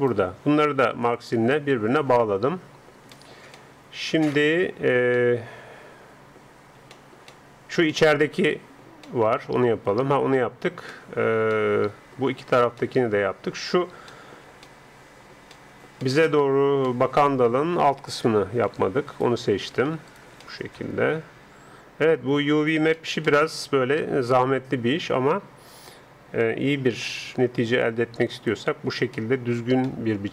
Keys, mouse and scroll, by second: 0.0-1.8 middle drag, 1.0-3.0 drag, 1.0 right click, 2.9-13.3 middle drag, 6.9 scroll up 1, 13.4-17.1 middle drag, 18.3 a, 19.2-20.4 alt+right drag, 20.4 click, 20.4 middle click, 21.4 right click, 23.0-25.2 middle drag, 27.0-28.4 middle drag, 28.4-30.2 drag, 30.0-30.3 middle drag.